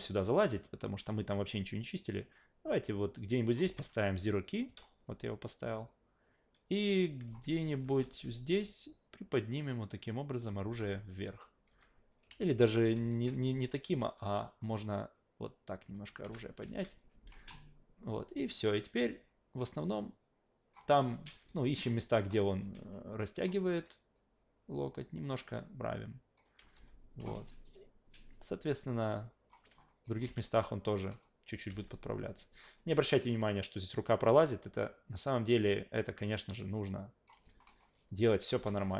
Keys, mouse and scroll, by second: 13.9 w, 14.0-14.6 drag, 15.1 click, 16.2 s, 16.7 e, 18.1-19.6 drag, 19.8-20.7 alt+drag, 20.9 alt+middle click, 21.3 alt+right drag, 21.6 alt+click, 22.6-23.4 alt+drag, 24.1 click, 25.9 click, 26.6 s, 26.8 s, 28.7-29.5 drag, 29.7 alt+middle click, 30.0 alt+drag, 30.2 alt+v, 31.0 alt+middle click, 31.7 alt+v, 31.9-32.6 alt+drag, 34.7-37.3 drag, 37.7 alt+middle click, 38.0-38.3 alt+drag, 38.5 e, 38.7-38.9 alt+drag.